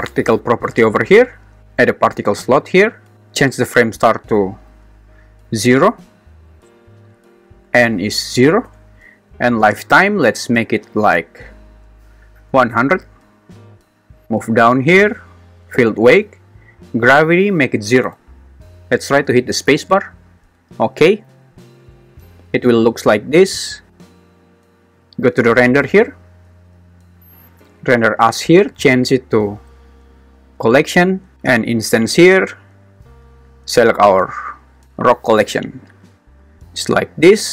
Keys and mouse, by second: 2.1-5.9 drag, 7.8 click, 10.0-12.7 drag, 12.5 0, 15.9 drag, 17.4 click, 19.7 space, 20.6 space, 21.1 shift+Left, 24.3 click, 28.7-30.9 drag, 33.4-35.2 drag.